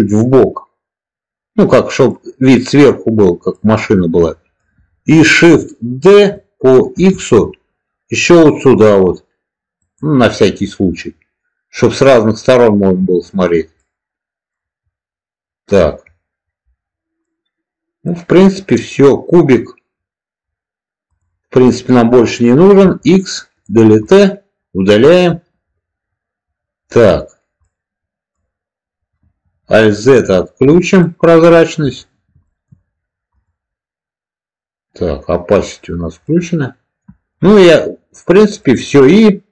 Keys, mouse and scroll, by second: 2.5-3.1 middle drag, 3.4-4.6 middle drag, 6.0 shift+d, 6.8 x, 9.7 drag, 10.4-13.1 middle drag, 13.8-14.5 middle drag, 17.2-18.0 middle drag, 21.0 click, 21.6-22.1 middle drag, 22.7 x, 23.9-25.1 middle drag, 27.6-28.3 middle drag, 30.2 alt+z, 30.9-31.6 middle drag, 32.4 shift+middle click, 33.3 click, 36.1-37.2 middle drag, 37.7-38.2 middle drag, 38.5 middle click.